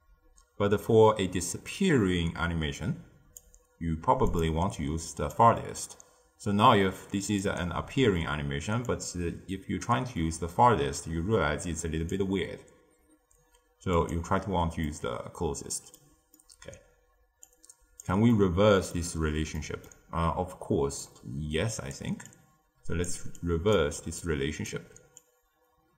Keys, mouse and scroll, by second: 4.2 click, 5.2-8.3 drag, 8.8-11.8 drag, 13.9 click, 14.8-17.4 middle drag, 17.4 click, 18.2 middle click, 19.1-19.5 scroll down 1, 19.5-21.0 middle drag, 21.0 click, 22.2-25.9 drag.